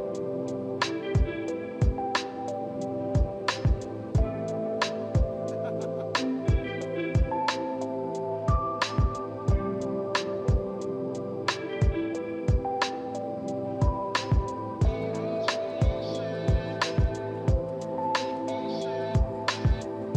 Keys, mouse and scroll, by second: 0.7 middle click, 1.6 ctrl+alt+middle click, 5.5 7, 5.9 Return, 14.6-15.1 scroll up 4, 15.1-16.2 scroll down 4, 16.2-16.6 scroll up 3, 16.7 scroll down 4, 19.0 right click.